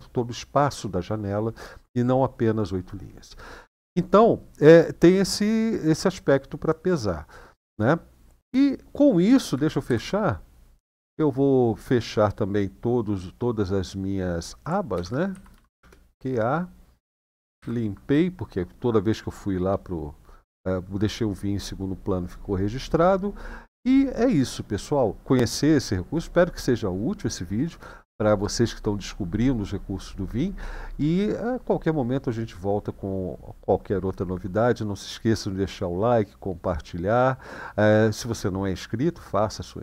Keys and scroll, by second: 9.6 ctrl+d, 14.7-15.5 typing, 17.4 ctrl+l, 17.4 typing.